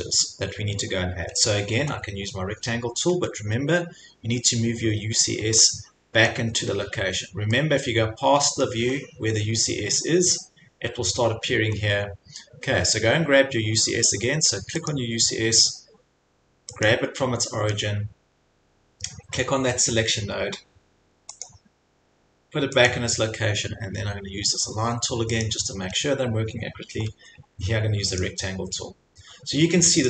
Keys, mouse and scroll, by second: 3.1 scroll, 4.1 scroll, 6.3 scroll, 7.0 scroll, 8.6-9.2 scroll, 9.7 scroll, 11.7 scroll, 14.9 click, 16.9 click, 17.7-18.4 scroll, 19.3 scroll, 21.4 click, 22.7 scroll, 23.0 click, 25.5 click, 28.2 click.